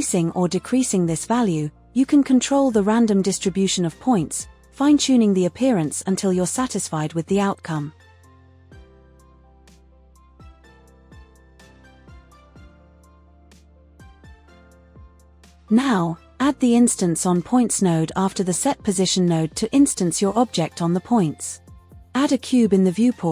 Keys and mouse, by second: 1.0 KP_0, 4.5-8.9 drag, 9.3 click, 10.1-13.8 drag, 16.1 click, 16.5 click, 17.0 shift+a, 21.2-21.7 drag, 21.9-22.6 drag, 22.9 shift+a.